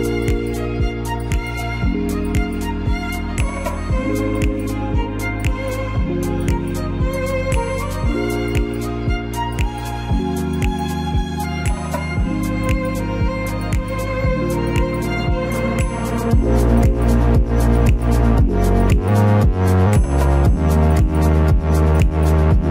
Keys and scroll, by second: 6.7 Delete.